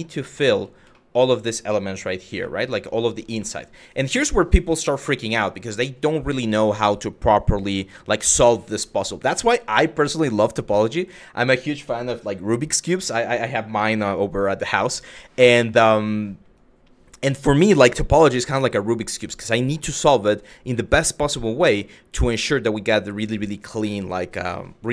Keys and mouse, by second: 0.1 f, 0.6 middle click, 2.1 middle click, 3.1 middle click.